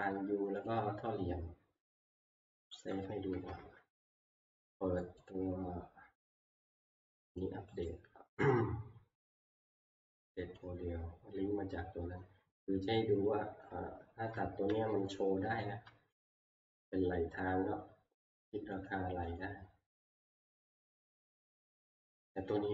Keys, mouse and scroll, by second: 0.7 click, 2.9 scroll, 3.6 ctrl+s, 5.4 click, 6.2-7.4 scroll, 7.4 click, 7.9 right click, 10.3 middle click, 10.5 click, 10.6 click, 14.3 middle click, 14.6 middle click, 14.6 middle click, 14.7 middle click, 15.7 middle click, 16.3 t, 16.5 middle click, 16.6 middle click, 16.7 middle click, 18.2 click, 18.9 click, 18.9 scroll, 19.4 click, 20.3-20.8 scroll, 21.5 middle click, 21.9 middle click, 22.3-22.7 scroll.